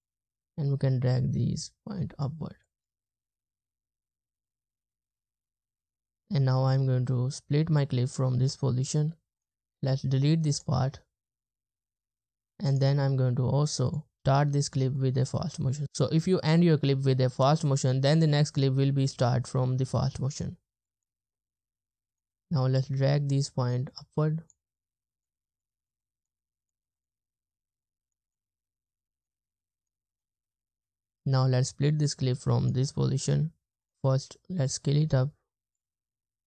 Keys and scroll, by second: 3.0 space, 6.2 space, 9.7 BackSpace, 10.9 space, 12.0 space, 21.1 space, 21.3 space, 21.6 space, 22.0 space, 27.0 space, 27.5 space, 28.3 space, 28.7 space, 30.2 space, 30.7 space, 33.3 BackSpace.